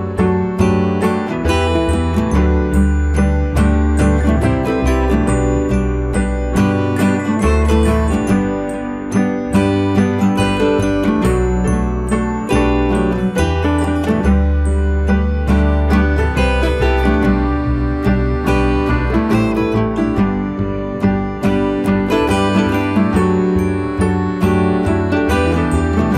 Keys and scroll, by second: 17.8 ctrl+g.